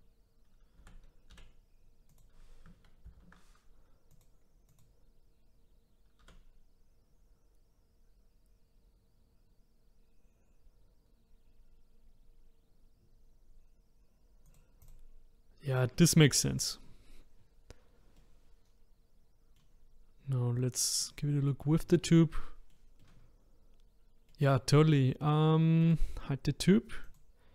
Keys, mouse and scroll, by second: 0.8 a, 1.3 s, 3.0 ctrl+z, 4.1 click, 4.7 click, 6.2 s, 14.8 click, 18.2-21.0 middle drag, 21.0 click, 21.6-25.8 middle drag, 25.8 click, 27.0 click.